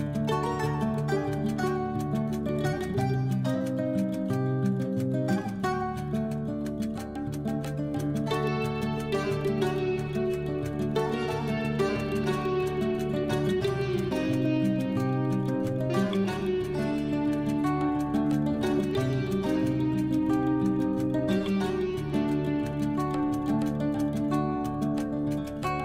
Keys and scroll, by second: 24.9 F12.